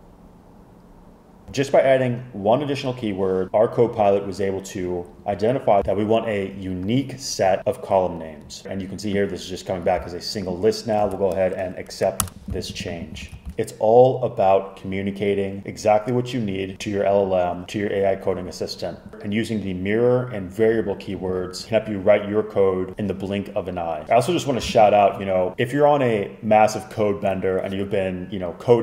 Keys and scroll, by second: 12.3 super+Return, 13.3 super+s.